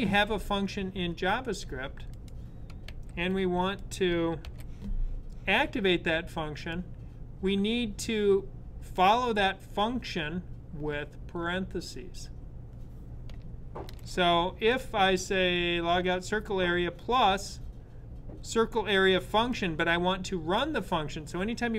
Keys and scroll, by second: 2.6 super+/, 4.2 super+/, 13.5 super+s.